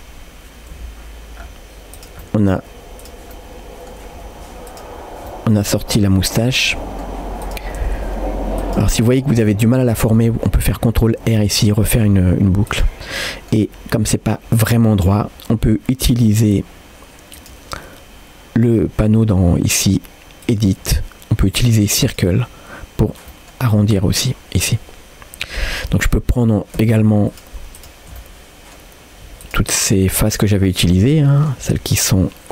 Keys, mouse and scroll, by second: 0.8 g, 2.2 middle click, 3.0 click, 3.4 middle click, 4.2 g, 5.3 middle click, 6.4 click, 6.7 middle click, 7.4 click, 7.8 g, 8.9 middle click, 9.7 middle click, 11.1 ctrl+r, 13.2 middle click, 17.4-22.5 drag, 23.1 scroll up 1, 23.3 middle click, 24.3-25.9 middle drag, 26.8 3, 27.3 click, 28.2 middle click, 28.8-29.4 scroll up 1, 29.4-30.4 shift+drag, 30.4 middle click, 31.2 shift+middle click, 31.7-32.5 middle drag.